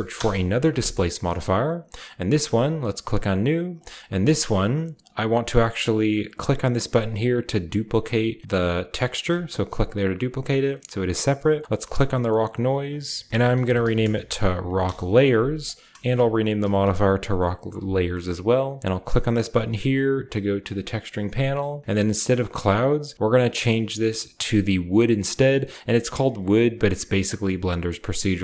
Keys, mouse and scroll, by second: 0.1 Return, 1.2-2.8 scroll down 1, 2.8 click, 3.7 click, 5.0 click, 9.2 click, 11.9-13.3 drag, 13.3-15.3 typing, 15.5 ctrl+click, 15.9 ctrl+c, 16.3 ctrl+click, 16.5 ctrl+v, 20.6 click, 22.2 click, 26.7 click.